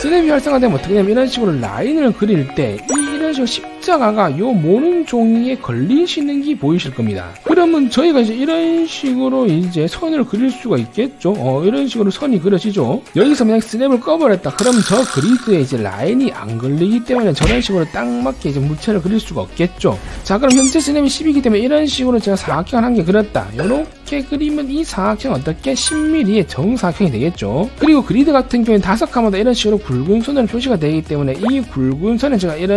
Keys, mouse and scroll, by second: 1.7 middle click, 2.1 1, 2.4 right click, 7.9 right click, 9.0 right click, 9.6 right click, 10.1 right click, 10.6 click, 11.2 click, 11.6 click, 12.1 click, 12.5 click, 13.0 right click, 15.9 1, 16.3 right click, 17.2 click, 18.4 click, 19.0 click, 19.5 click, 21.8 1, 22.3 right click, 23.2 click, 23.6 click, 24.0 click, 24.6 click, 25.3 click, 25.6 right click, 28.4 e, 28.6 right click, 28.9 click, 29.2 click, 29.4 right click, 31.0 1, 31.2 right click, 31.7 click, 32.4 click.